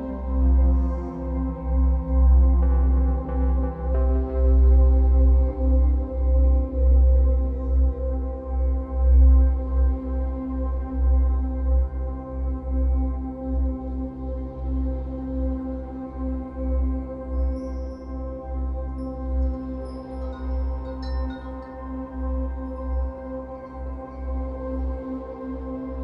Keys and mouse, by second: 2.5 n, 3.3 ctrl+z, 3.3 -, 3.9 click, 4.4 ctrl+space, 4.6 click, 4.7 ctrl+space, 5.7 click, 13.0 Return, 13.7 click, 19.0 =, 23.6 click.